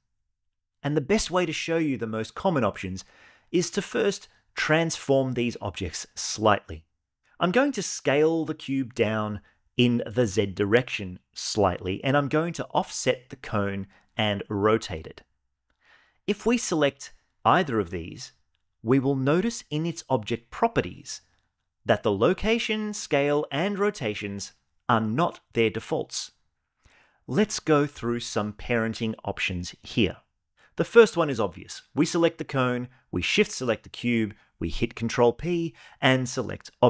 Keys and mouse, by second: 7.7 s, 8.0 z, 10.0 click, 10.9 click, 12.0 g, 12.2 y, 14.2 r, 14.6 x, 21.0 click, 33.4 shift+click, 34.8 ctrl+p.